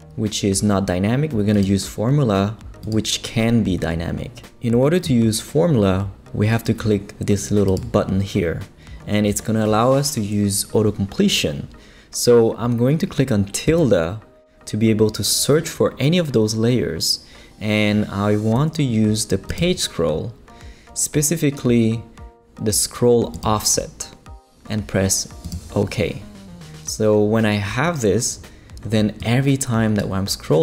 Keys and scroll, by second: 13.7 `.